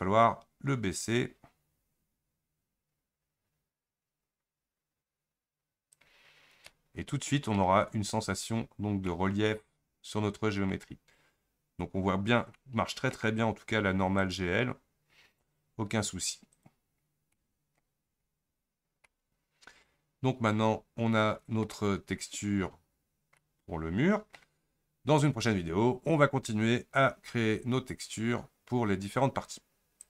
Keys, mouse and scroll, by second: 0.0-3.6 drag, 6.4-6.7 scroll up 5, 6.7-8.6 middle drag, 8.6 scroll down 1, 9.1-14.3 middle drag, 14.3 click, 16.6-30.1 drag.